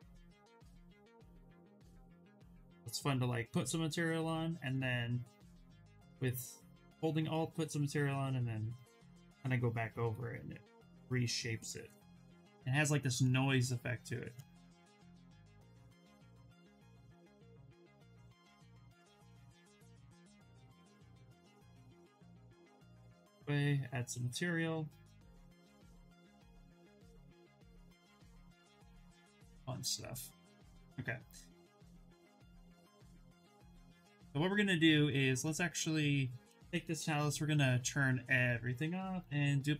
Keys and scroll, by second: 17.0 ctrl+z, 17.2 ctrl+z, 38.9 ctrl+shift+d.